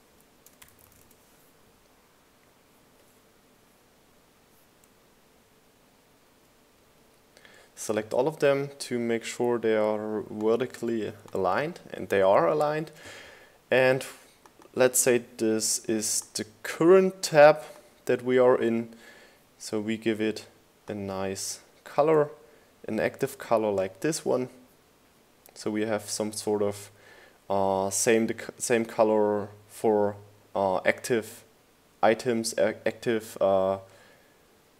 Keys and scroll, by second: 0.0-0.4 typing, 1.1 Return.